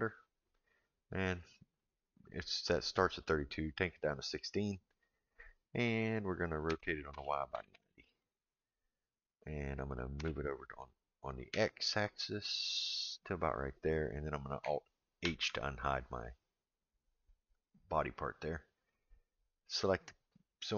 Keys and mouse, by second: 1.8-4.4 drag, 6.7 r, 10.2 g, 15.2 alt+h, 19.9 click.